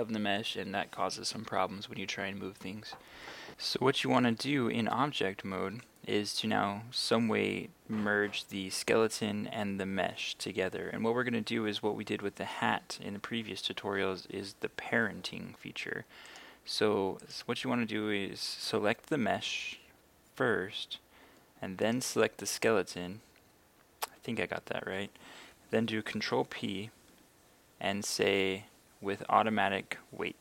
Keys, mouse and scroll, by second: 1.3 KP_1, 3.6 click, 16.3 right click, 18.3 right click, 21.9 shift+right click, 26.4 ctrl+p.